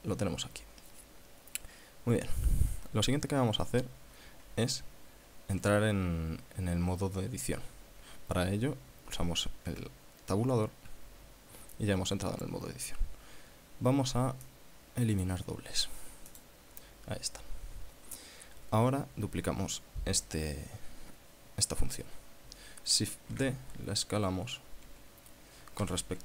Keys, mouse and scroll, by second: 1.3 scroll down 2, 9.9 Tab, 14.7 click, 16.6 click, 23.6 shift+d, 26.0 s.